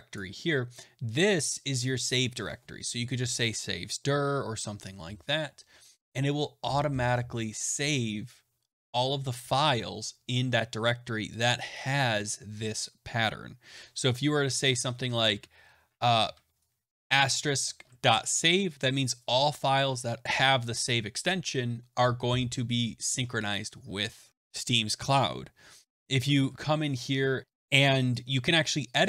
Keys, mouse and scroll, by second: 0.1 click, 11.3 click, 12.2 click, 14.2 Right, 16.2 Left, 17.7 Right, 17.8 Right, 18.3-18.7 Right, 18.4 Left, 26.0 BackSpace, 26.1 BackSpace, 26.3 BackSpace, 26.4 BackSpace, 27.4 click.